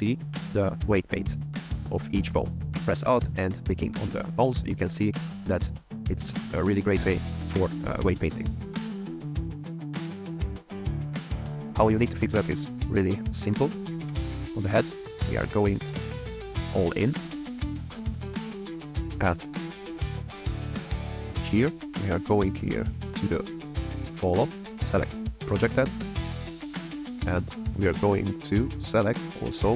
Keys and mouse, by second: 2.2 alt+click, 3.2 alt+click, 4.0 alt+click, 5.5 alt+click, 6.0 alt+click, 6.4 alt+click, 7.0 alt+click, 7.5 alt+click, 7.9 alt+click, 8.5 alt+click, 9.2 shift+click, 9.5 click, 10.2 f, 10.8 click, 11.3 shift+middle click, 16.6 click, 17.3 middle click, 17.6 click, 19.0 click, 19.3 click, 20.0 click, 22.4 click, 22.7 click, 24.7 click, 26.3 click, 27.3 click, 28.2 click.